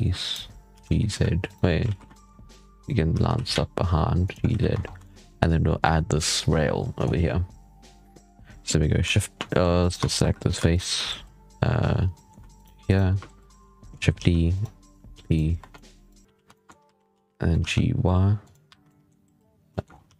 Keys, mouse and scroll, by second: 0.6 g, 1.7 alt+a, 1.9 scroll down 1, 2.0 shift+middle click, 2.4 click, 3.0 g, 4.4 z, 4.6 Tab, 4.7 scroll down 4, 4.9-8.0 shift+middle drag, 9.3-9.7 middle drag, 9.7 right click, 9.8 Tab, 12.0-12.4 middle drag, 12.4 shift+right click, 12.7 shift+right click, 14.0 shift+d, 15.0 p, 15.4 Tab, 15.6-15.9 middle drag, 15.9 right click, 16.2 z, 16.4 shift+middle click, 16.7 g, 18.6 1, 18.7 middle click, 19.6 shift+middle click, 19.7 scroll up 5, 19.9 g.